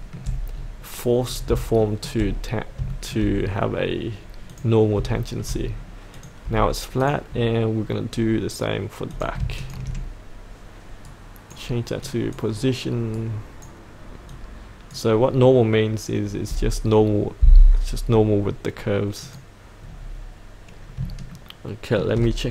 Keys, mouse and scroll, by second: 1.2 scroll up 1, 1.8 shift+middle click, 2.9 shift+middle click, 3.3-4.5 scroll up 1, 4.5 click, 5.1 shift+middle click, 5.7-6.1 scroll down 1, 6.1 click, 9.6 ctrl+click, 11.0 right click, 12.0 click, 13.1 right click, 14.3-15.6 drag, 19.8-20.9 scroll up 1, 21.0 shift+scroll up 1, 21.8 shift+middle click.